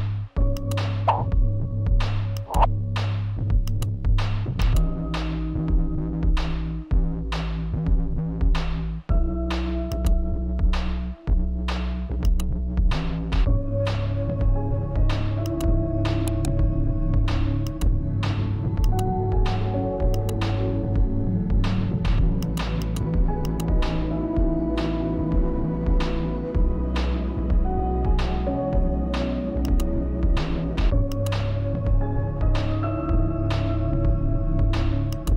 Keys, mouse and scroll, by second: 13.4 click, 14.2-15.5 right drag, 15.5-23.3 drag, 23.3-27.1 typing, 28.1 click, 29.5 shift+click, 31.3 r, 33.6-35.3 drag.